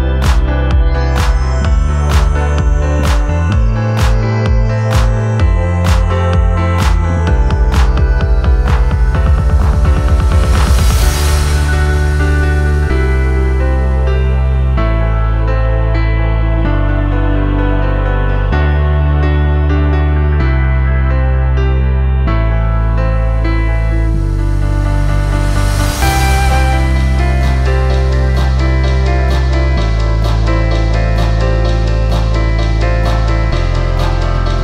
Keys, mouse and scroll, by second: 1.6 alt+BackSpace, 9.6 click, 9.9 click, 11.0 click, 11.4 click, 12.3 click, 13.8 click, 17.0 click, 17.2 click, 21.5 alt+click, 23.5 ctrl+z, 26.7 ctrl+click, 29.4 click.